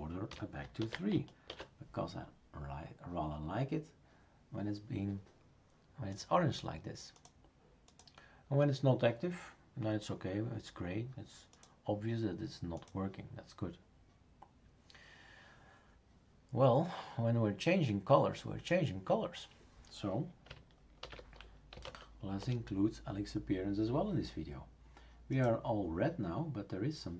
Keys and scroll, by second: 0.0-0.5 typing, 0.8 ctrl+s, 1.5 shift+super+r, 21.0 shift+super+d, 21.5-22.3 typing, 22.4 Return.